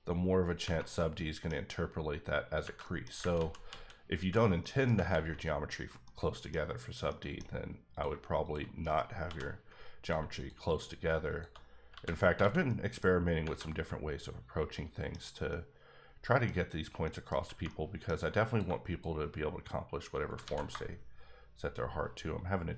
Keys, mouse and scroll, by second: 0.5 click, 0.9 middle click, 2.8 middle click, 3.3 ctrl+z, 3.7 ctrl+z, 4.6 middle click, 4.9 ctrl+middle click, 5.1 ctrl+z, 5.9 z, 6.0 middle click, 6.8 scroll down 2, 7.0 middle click, 7.9 click, 8.0 shift+click, 8.7 click, 8.8-9.2 scroll up 2, 9.2 j, 10.0 click, 10.1 shift+click, 10.7 shift+double click, 11.3 shift+click, 11.9 f, 12.4 alt+a, 12.6 middle click, 13.1 scroll down 3, 13.5-15.1 middle drag, 15.1-15.5 scroll up 2, 15.5 middle click, 17.1 middle click, 17.6 middle click, 18.5 click, 20.4 alt+s.